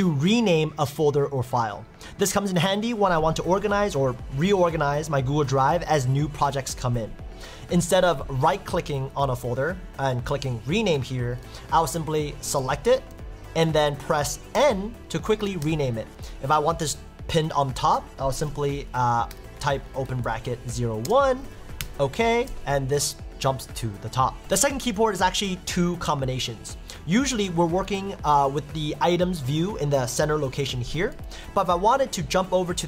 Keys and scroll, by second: 12.6 Left, 12.8 Up, 13.1 Down, 15.6 Left, 21.8 Return.